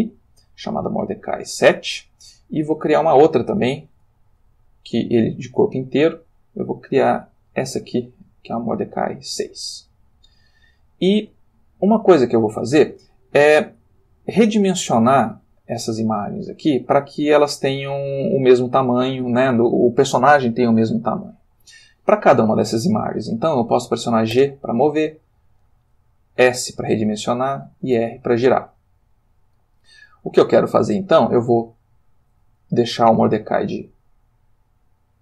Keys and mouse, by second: 3.8 shift+a, 5.7 click, 7.5 click, 8.7 click, 24.3 g, 25.7 click, 26.4 s, 27.4 click, 28.0 r, 29.2 Escape, 30.4 s, 31.2 click, 31.4 g, 32.2 click, 32.4 s, 33.1 click, 33.3 g, 35.1 click.